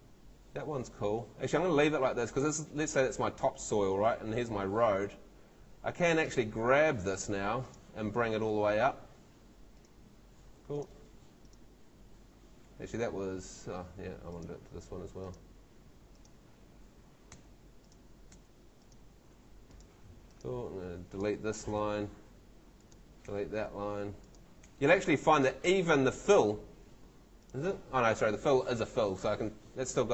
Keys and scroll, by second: 17.3 BackSpace, 21.7 BackSpace, 23.2 BackSpace, 24.7 BackSpace, 29.2 Home.